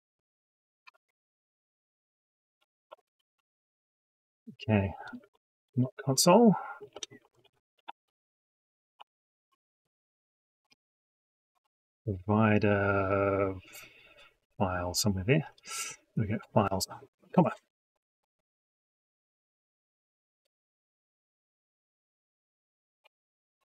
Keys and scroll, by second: 0.7 ctrl+v, 5.5 ctrl+y.